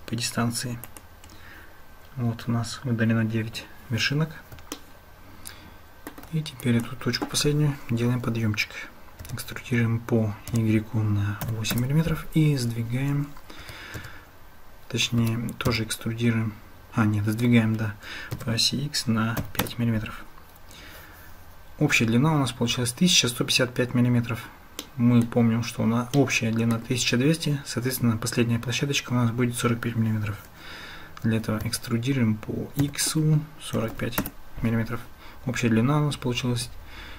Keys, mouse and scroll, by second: 4.8-6.1 shift+drag, 6.6 click, 13.6 g, 25.0 click, 26.3 click, 31.6 e.